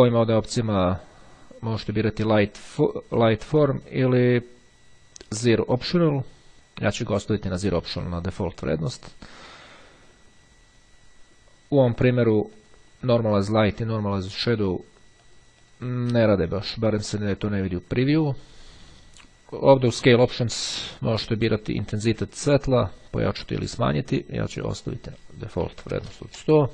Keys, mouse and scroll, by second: 1.6 click, 3.8 click, 5.7 click, 6.5 click, 8.4 click, 11.7 click, 12.7 click, 13.5 click, 15.2 click, 21.3-22.5 drag, 24.9 click, 25.3 KP_1, 25.7 KP_0, 25.9 KP_Enter.